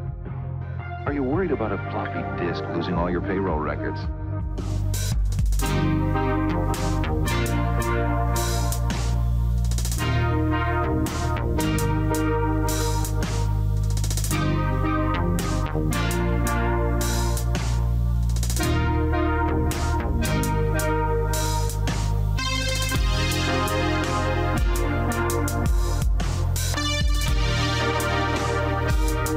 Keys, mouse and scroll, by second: 2.9 click, 5.4-7.6 scroll up 1, 9.1 right click, 9.7 middle click, 10.1 q, 11.1 click, 14.3 click, 25.3 Escape, 26.1 q, 27.9 click, 28.5-28.9 scroll up 1.